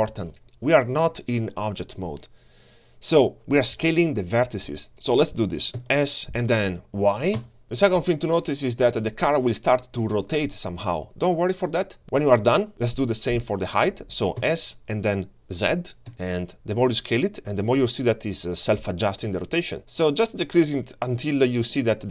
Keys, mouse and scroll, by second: 0.4-4.9 drag, 5.8 s, 14.4 s.